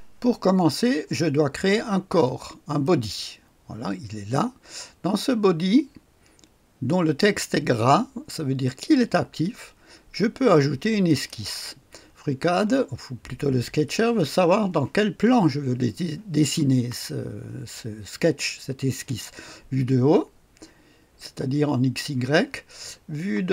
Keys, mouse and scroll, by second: 2.7 click, 11.0 click.